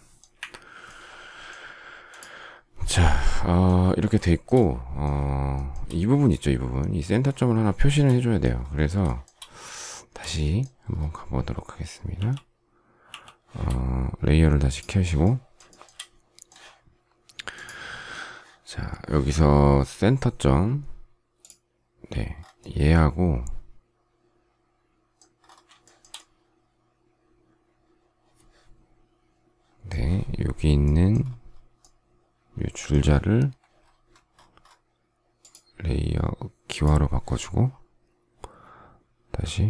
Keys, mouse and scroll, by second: 0.3 Delete, 4.2 shift+middle click, 5.5 shift+middle click, 7.7 shift+middle click, 9.0 shift+middle click, 12.1 shift+c, 15.6 shift+middle click, 25.8 shift+middle click.